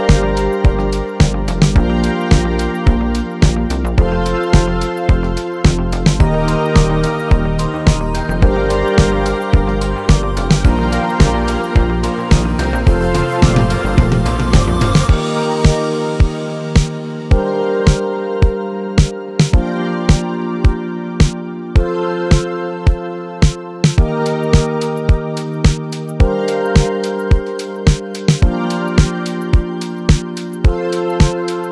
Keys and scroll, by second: 23.3 ctrl+w.